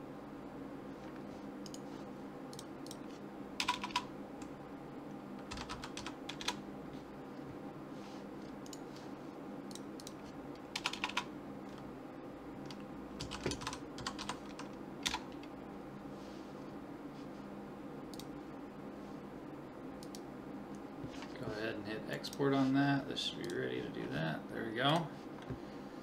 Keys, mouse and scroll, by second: 1.7-3.6 drag, 2.5 right click, 3.7 click, 3.8 BackSpace, 3.9 BackSpace, 8.7-10.9 drag, 9.7 right click, 10.9 BackSpace, 11.3 click, 18.1-19.9 drag, 20.0-22.0 drag, 25.7-26.0 middle drag.